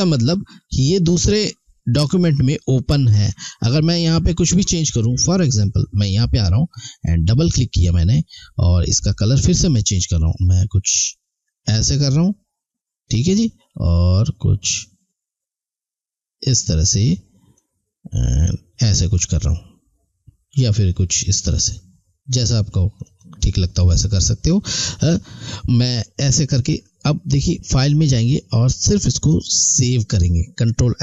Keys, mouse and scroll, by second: 1.1 click, 9.2 click, 17.6 click, 27.7 click.